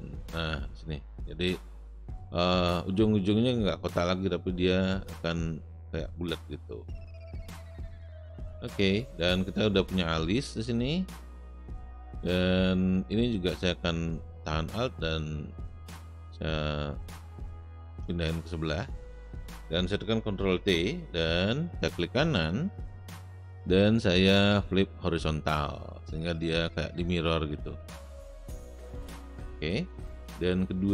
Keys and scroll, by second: 20.5 ctrl+t.